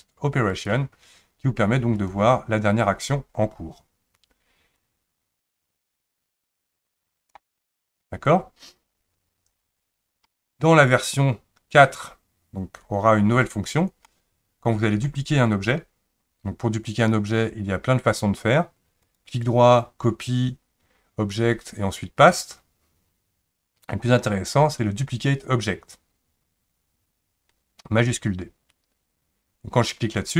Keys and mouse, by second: 4.9-7.4 drag, 14.2-15.1 middle drag, 19.0-30.3 right drag.